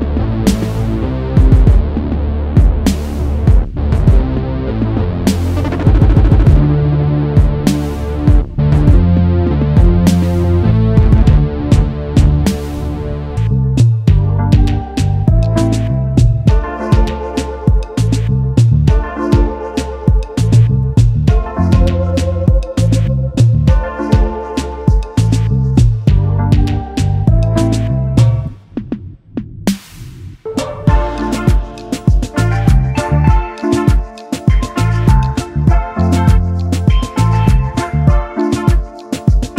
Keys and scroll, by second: 15.1 space, 16.2 space, 24.4 space, 25.4 space, 30.8 space, 31.3 ctrl+s, 37.6 ctrl+s.